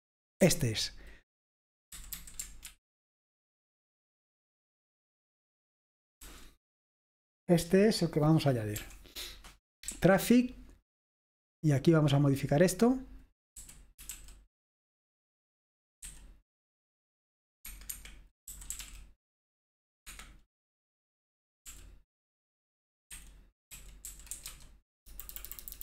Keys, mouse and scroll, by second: 0.3-1.0 typing, 2.2 typing, 2.7 ctrl+w, 3.1 ctrl+w, 6.3 j, 8.9 p, 10.4-11.1 typing, 12.7 typing, 13.7 typing, 15.0-16.2 typing, 17.7 Escape, 18.0 Escape, 18.3-19.4 typing, 20.4 Escape, 22.0 i, 23.2-25.0 typing, 25.1 Delete, 25.4 Delete, 25.5 Delete, 25.6 Delete.